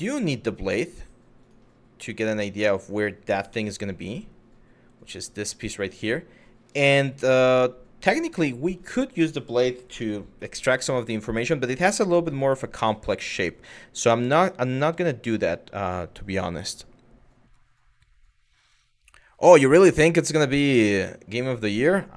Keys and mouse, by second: 0.3 click, 0.6 click, 1.0 click, 3.1 z.